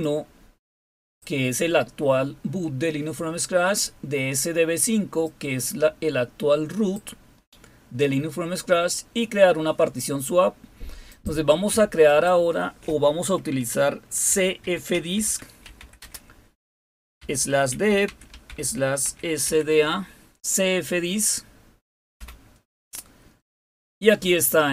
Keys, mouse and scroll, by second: 0.0-1.3 drag, 5.3-7.1 drag, 11.1 click, 12.2 click, 14.0-20.2 typing, 22.1 Return.